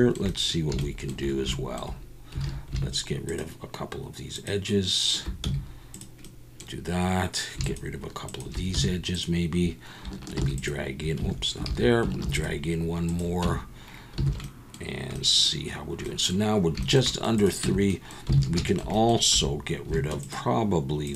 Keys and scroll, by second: 2.4 alt+a, 5.4 x, 8.7 x, 10.4 ctrl+r, 11.2 Escape, 11.7 ctrl+z, 12.2 ctrl+r, 13.4 Tab, 14.2 alt+a, 17.6 Tab, 18.4 alt+a, 19.3 2.